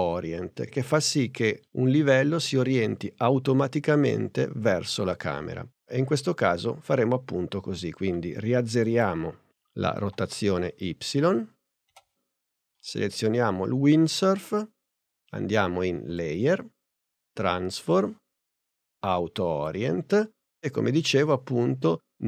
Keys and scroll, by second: 10.1 0, 11.9 Return.